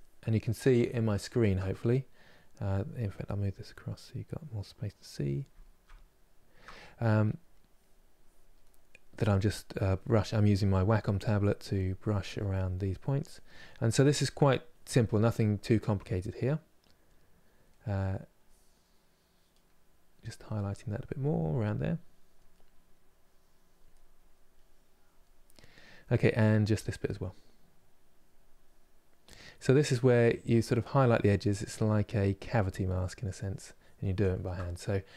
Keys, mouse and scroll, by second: 0.9-3.9 shift+middle drag, 3.9-6.7 drag, 6.7 middle click, 7.4 click, 8.3 middle click, 8.9 click, 9.7 middle click, 10.3 click, 10.8 middle click, 11.3 click, 12.1 middle click, 12.6 click, 13.4 middle click, 14.0 click, 14.7-18.1 middle drag, 18.1-19.4 drag, 19.4 middle click, 20.0 click, 20.8 middle click, 21.6 click, 22.2 middle click, 22.9 click, 23.6 middle click, 24.3-25.3 drag, 25.3-26.6 middle drag, 26.6-29.3 drag, 29.3 middle click, 30.3 click, 31.0 middle click, 31.5-34.1 drag, 34.1-35.1 ctrl+middle drag.